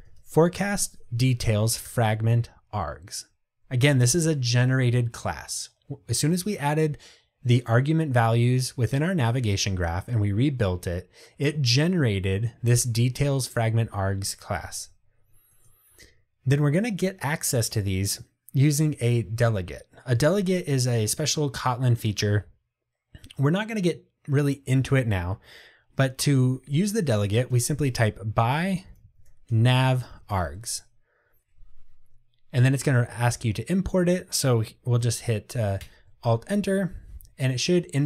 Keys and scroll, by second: 1.9 Return, 35.9 alt+Return.